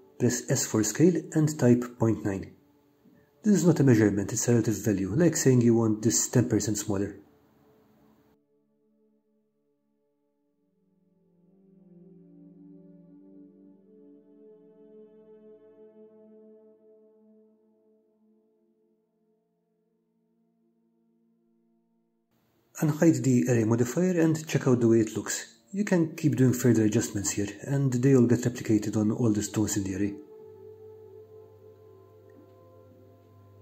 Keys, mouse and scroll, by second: 1.5-3.1 middle drag, 4.3 s, 8.1 9, 9.6 Return, 10.3-11.8 middle drag, 15.9 s, 16.4 ., 17.1 9, 18.1 Return, 19.0-20.8 middle drag, 22.1 click, 23.0 scroll up 1, 23.1-33.2 middle drag.